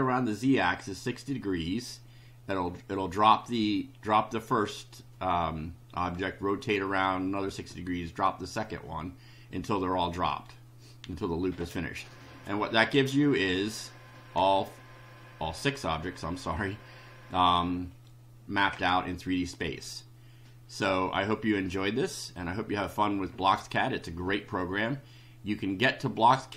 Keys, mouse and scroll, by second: 9.5 click, 26.2 click.